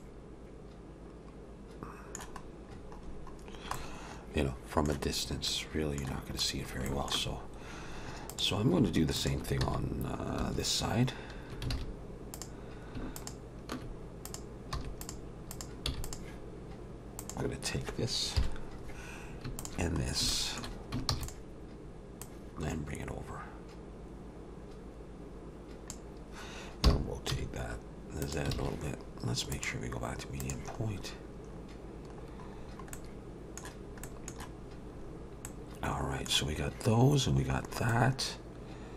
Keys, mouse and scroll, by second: 0.0 middle click, 2.7-3.7 scroll down 9, 3.7 middle click, 5.1-5.5 scroll down 2, 5.5 middle click, 6.4 scroll up 3, 6.9 shift+middle click, 8.3 click, 9.2 shift+click, 9.6 x, 11.7 alt+a, 12.3 click, 13.2 shift+click, 14.3 click, 14.7 x, 15.5 click, 15.9 x, 17.2 click, 18.4 KP_7, 19.6 shift+click, 20.0 scroll down 2, 20.3 shift+middle click, 21.1 shift+d, 21.3 shift+d, 22.2 click, 26.8 r, 28.6 alt+a, 29.5 click, 30.8-31.5 scroll down 3, 31.5-31.8 scroll up 2, 32.2 scroll down 1, 32.3-32.8 scroll down 4, 32.9 middle click, 34.0 middle click, 34.9 scroll up 2, 35.5 middle click, 37.6-37.9 scroll down 3, 37.9 middle click.